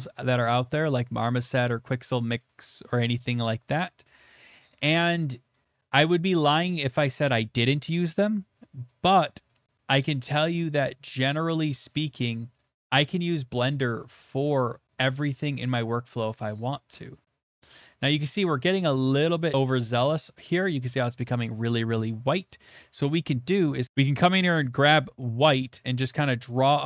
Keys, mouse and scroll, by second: 0.6 click, 1.0 click, 1.5 shift+middle click, 2.1 click, 2.4 click, 3.0 click, 3.3 click, 3.9 middle click, 4.4 click, 4.8 click, 5.5 click, 5.8 middle click, 6.1 shift+middle click, 9.1 click, 9.5 click, 10.6 click, 11.7 click, 12.0 click, 13.0 click, 13.3 click, 13.3 shift+middle click, 13.9 middle click, 15.3 click, 15.5 click, 16.2 click, 16.5 click, 17.1 middle click, 18.7 click, 19.1 click, 19.5 shift+middle click, 20.4 shift+middle click, 22.3 middle click, 22.4 middle click, 22.4 shift+middle click, 23.8 click, 25.4 click, 26.1 click, 26.4 click, 26.7 click.